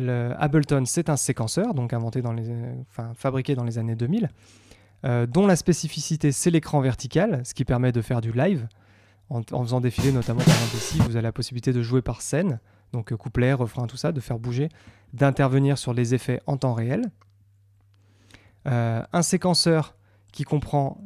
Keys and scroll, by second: 11.2 space.